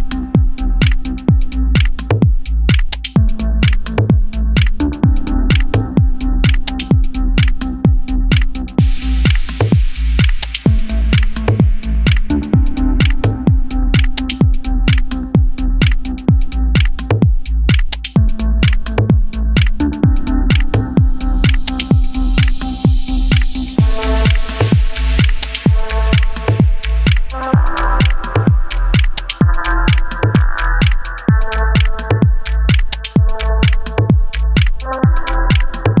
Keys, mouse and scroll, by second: 0.1 Tab, 0.3 shift+middle click, 0.7 Tab, 0.8 middle click, 1.1 click, 1.2 g, 1.4 middle click, 1.8 Tab, 1.8 middle click, 2.0 Tab, 2.0-2.8 shift+middle drag, 2.8-11.4 typing, 3.0 shift+middle click, 3.1 scroll up 3, 3.3 alt+drag, 3.4-3.8 shift+middle drag, 4.0 shift+middle click, 4.1 scroll up 1, 7.3 alt+click, 7.9 alt+click, 10.9 alt+m, 11.6 Tab, 11.7 middle click, 12.0 scroll up 3, 12.1 Tab, 12.2-12.6 middle drag, 12.6 shift+drag, 12.7-13.1 middle drag, 13.1 g, 13.9 2, 13.9 middle click, 14.1 3, 14.3 alt+shift+click, 14.4 middle click, 14.8 middle drag, 15.0 scroll up 3, 15.2 ctrl+z, 15.2-15.6 middle drag, 15.6 g, 15.8 middle drag, 16.0 alt+shift+click, 16.2 middle click, 16.3 g, 16.6 g, 17.4-17.8 scroll down 4, 17.4-17.8 middle drag, 17.8 middle drag, 18.1-20.4 typing, 18.2 scroll up 1, 18.2 shift+middle drag, 18.4 click, 18.7-19.2 scroll up 2, 18.8 shift+middle click, 19.2 scroll down 1, 20.8 middle click, 20.9 Tab, 21.0 middle drag, 21.2 Tab, 21.5-22.7 typing, 21.5 drag, 21.9 scroll up 2, 23.2 scroll down 3, 23.2 middle drag, 23.5 Tab, 23.6 click, 23.7 middle click, 23.7 g, 24.0-24.4 middle drag, 24.4 Tab, 24.5 middle click, 24.6 Tab, 24.8 alt+drag, 24.9 scroll down 2, 24.9 shift+middle drag, 25.1 scroll up 2, 25.4 shift+middle click, 25.6 alt+shift+click, 25.7-26.3 middle drag, 26.3 alt+shift+click, 26.4 shift+middle click, 26.6 scroll up 1, 26.7 middle click, 27.2 alt+shift+click, 27.3-27.7 scroll down 4, 27.3 shift+middle click, 27.6 alt+shift+drag, 27.7 shift+middle drag, 28.0 scroll up 4, 28.2 alt+shift+click, 28.3 scroll down 2, 28.3-29.0 shift+middle drag, 29.0 s, 29.3 middle click, 29.5 KP_7, 29.6-30.7 scroll up 15, 29.6 shift+middle click, 29.9 shift+middle click, 30.8-31.2 scroll down 22, 31.2 middle drag, 31.4 Tab, 31.5 ctrl+e, 32.0 shift+middle drag, 32.2 alt+click, 32.5 middle drag, 32.7 alt+shift+drag, 32.8 middle drag, 33.0 ctrl+e, 33.3 middle drag, 33.5 alt+click, 33.6 middle click, 33.7 s, 33.9 g, 34.3-34.8 middle drag, 34.8 scroll up 1, 35.1 Tab, 35.2-36.0 middle drag.